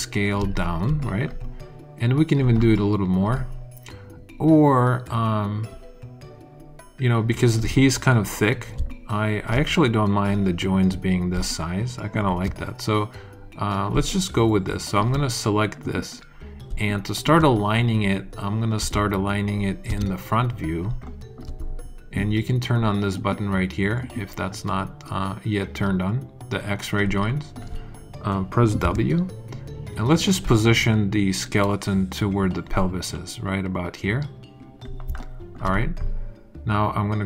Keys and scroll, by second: 18.7 space, 20.2 space, 20.8 alt+space, 28.8 w.